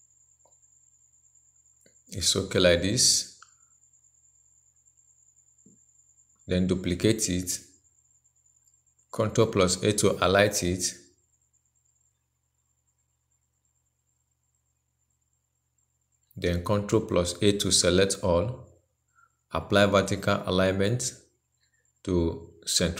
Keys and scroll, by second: 6.6 ctrl+j, 9.6 ctrl+a, 17.4 ctrl+a.